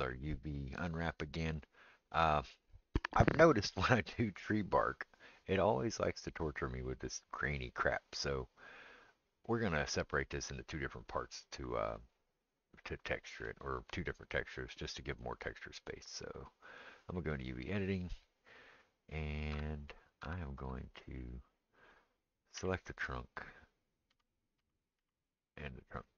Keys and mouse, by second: 17.4 click, 17.5-21.8 middle drag, 19.5 Tab, 20.2 Tab, 21.8 click, 21.9-26.1 middle drag, 22.6 l, 24.1 l, 24.6 l, 25.0 l.